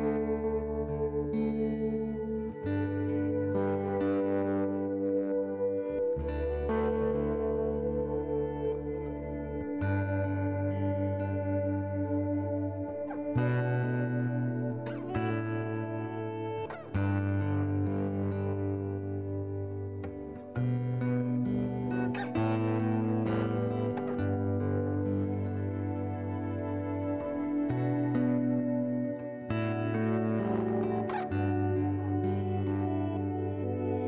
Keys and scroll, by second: 10.1 c, 19.9 m, 24.1 m, 27.7 3, 27.9 Return, 33.4 2, 33.7 0, 33.8 Return.